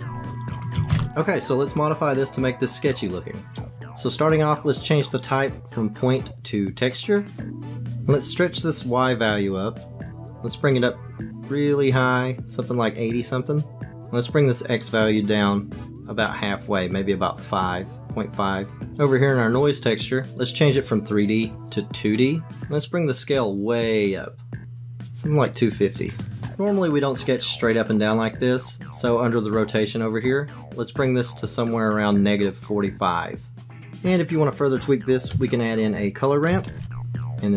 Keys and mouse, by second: 0.7 click, 1.8-3.7 middle drag, 6.1-7.4 drag, 10.2-13.9 drag, 15.7-18.8 drag, 19.7 click, 21.0-22.5 drag, 22.9-25.7 drag, 26.2 click, 29.9 click, 32.1-33.8 drag, 35.3 shift+a.